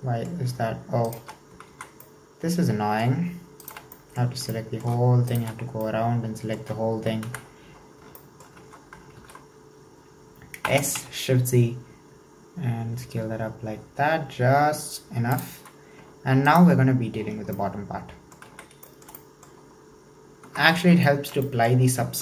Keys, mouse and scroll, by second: 1.1 alt+shift+right click, 1.3-1.7 scroll down 1, 1.7 alt+z, 2.0-3.7 middle drag, 3.7 alt+shift+right click, 4.0-5.3 middle drag, 5.3 alt+shift+right click, 5.7 scroll down 3, 5.9-7.2 middle drag, 7.2 KP_1, 7.8-8.3 scroll up 3, 8.3 shift+middle click, 9.2 alt+z, 9.4-10.1 scroll up 2, 10.1 scroll down 1, 10.7 s, 15.7-16.4 scroll down 2, 16.4 alt+right click, 17.0 scroll down 1, 17.2-17.5 scroll up 3, 17.5 middle click, 18.5 alt+z, 18.9-19.9 shift+middle drag, 19.9-20.4 scroll down 3, 20.4 Tab, 20.6-21.1 scroll down 1, 21.1-22.2 shift+middle drag.